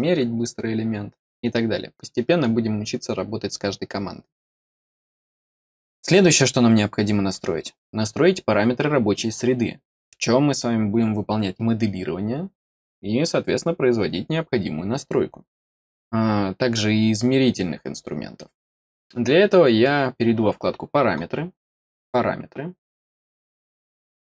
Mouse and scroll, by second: 21.9 click.